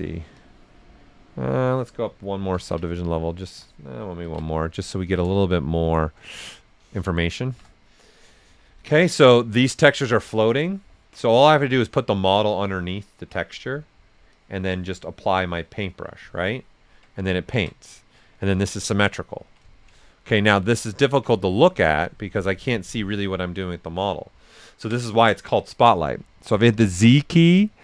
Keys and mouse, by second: 0.3 click, 0.8-2.5 alt+right drag, 2.5 ctrl+d, 3.3 alt+right click, 4.2 ctrl+d, 5.0 s, 5.1-6.9 drag, 6.9 alt+right click, 7.4 shift+f, 8.7-14.3 alt+right drag, 14.3-16.4 drag, 16.4 alt+right click, 18.1 right click, 21.3-23.1 drag, 23.1 alt+right click, 24.3 alt+right click, 26.5 typing.